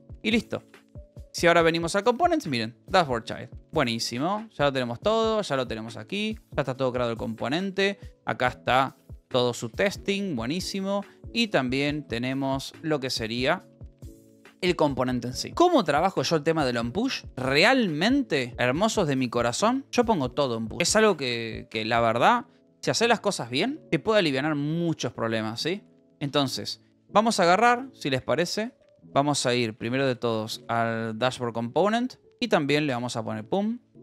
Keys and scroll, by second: 0.1 Up, 0.6 z, 1.6 \, 2.1 Return, 3.5-6.8 typing, 4.3 Return, 5.5 Return, 7.9 Return, 8.9 space, 10.6 ctrl+h, 10.9 ctrl+j, 11.9 j, 12.5 Return, 13.7 space, 14.3 e, 21.1 j, 26.1 space, 27.6 d, 28.6 d, 28.8 BackSpace, 29.3 a, 30.5 a, 33.9 a.